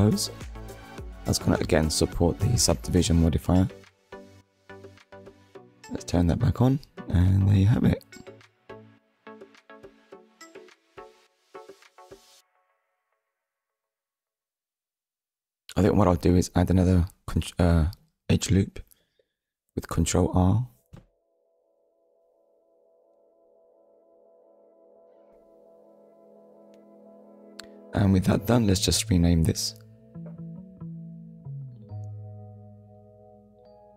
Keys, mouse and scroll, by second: 4.5 Tab, 5.0 scroll down 1, 6.2 click, 6.9 click, 7.3 middle click, 10.0-10.4 scroll down 1, 10.6-11.0 scroll down 1, 11.1 click, 11.8 Tab, 13.8 click, 14.5 click, 16.0 ctrl+r, 17.2 click, 17.7 right click, 18.4 Tab, 18.8 click, 19.3 middle click, 20.6-21.0 scroll down 1, 21.7 KP_1, 22.8 scroll down 1, 23.4 shift+middle click, 24.8 click, 26.7 click, 29.1 click, 33.5 shift+h, 33.9 a.